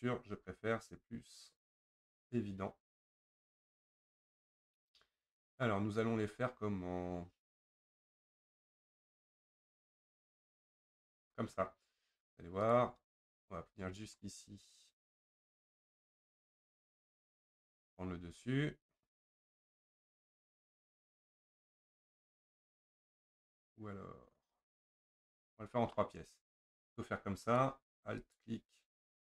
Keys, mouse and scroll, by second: 12.8 click, 13.4-14.5 middle drag, 14.5 scroll up 1, 15.2 scroll up 2, 16.1 ctrl+click, 16.6-17.0 scroll down 5, 17.0-21.5 middle drag, 27.6 click.